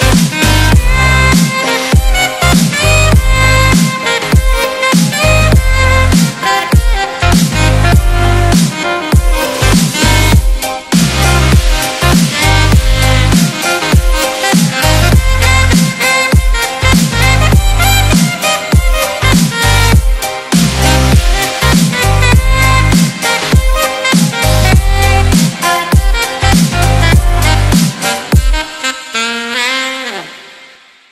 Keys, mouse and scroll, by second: 0.6 ctrl+=, 1.0 ctrl+-, 1.6 space, 4.1-4.7 drag, 7.3-7.9 space, 18.3 space, 18.5 click, 19.1 space, 19.3 click, 19.4-19.9 space, 20.4 F9, 23.4 click, 25.8 click, 27.7 click.